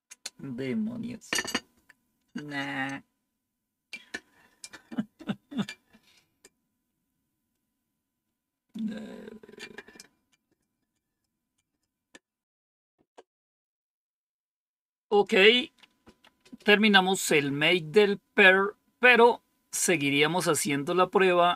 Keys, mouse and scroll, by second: 7.4-8.7 drag, 15.0 click.